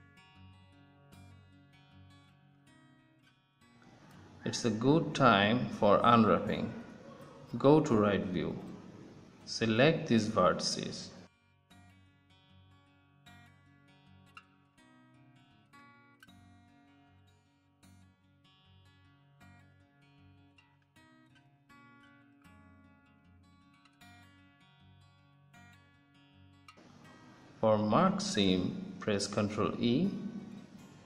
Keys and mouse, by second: 0.2-6.1 middle drag, 7.4-9.6 middle drag, 8.7 KP_3, 9.8 a, 19.8 z, 20.3 middle click, 21.5 b, 25.4 middle click, 25.8 z, 26.7-28.6 middle drag, 30.0 ctrl+e.